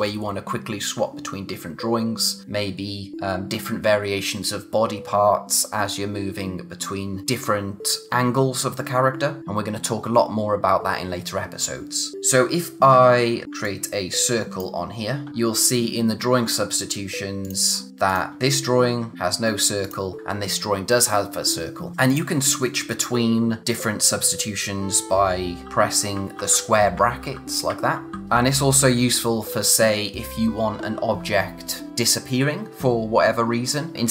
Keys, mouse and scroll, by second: 12.1 click, 17.4 click, 19.8 click, 21.9 click, 27.9 typing.